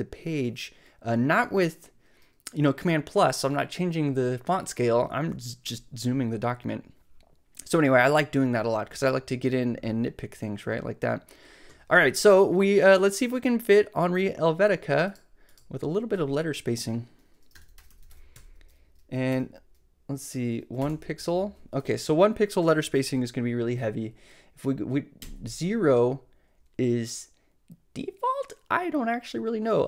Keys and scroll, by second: 17.4-19.3 typing, 20.7-21.4 typing.